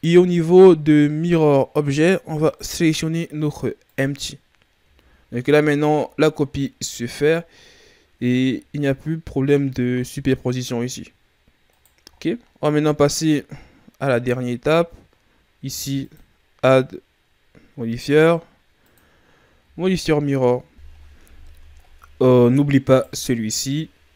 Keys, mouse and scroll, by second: 2.4 click, 4.7 a, 5.0-5.9 scroll down 2, 5.9-6.6 shift+scroll up 2, 6.6-7.4 scroll down 2, 7.4-8.2 scroll up 6, 8.2-10.0 shift+scroll down 5, 10.0-11.6 ctrl+scroll down 1, 11.6 right click, 12.0-12.8 ctrl+scroll up 3, 12.8-14.5 scroll down 3, 14.5 scroll down 2, 14.8-15.9 shift+scroll up 3, 15.9 click, 19.5 a, 20.0-20.7 scroll down 3, 21.4-21.8 scroll down 3, 21.8-22.1 scroll up 7, 22.8-23.7 right drag.